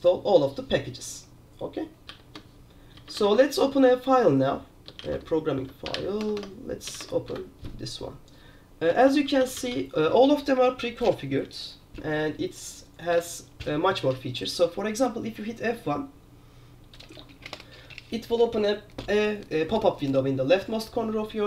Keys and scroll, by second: 2.2-6.9 typing, 7.1 Tab, 7.4 Return, 9.2 alt+k, 9.3 alt+k, 9.5 alt+k, 9.7 alt+k, 9.8 alt+k, 13.3 F1.